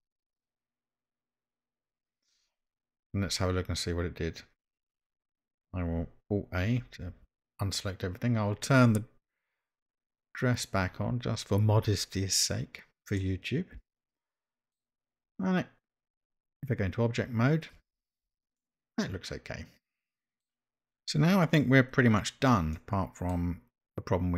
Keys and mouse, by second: 7.1 alt+a, 10.5 click, 13.2-14.7 middle drag, 18.0 Tab, 18.6-20.4 middle drag, 22.7-23.3 middle drag.